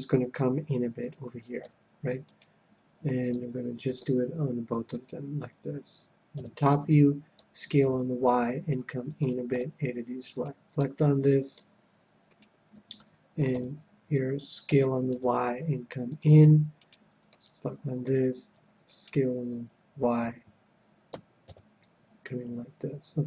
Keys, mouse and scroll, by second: 1.0-2.8 drag, 1.6 a, 2.3-3.9 right drag, 3.2-5.1 middle drag, 5.1-6.5 right drag, 6.3 KP_7, 7.3 s, 9.1-11.0 drag, 9.5 a, 10.2-12.3 middle drag, 10.2-14.3 right drag, 13.4 KP_7, 14.6 s, 16.2-17.7 drag, 17.3-18.8 middle drag, 17.3-18.3 right drag, 18.9-20.5 right drag, 20.1 KP_7, 21.0 s.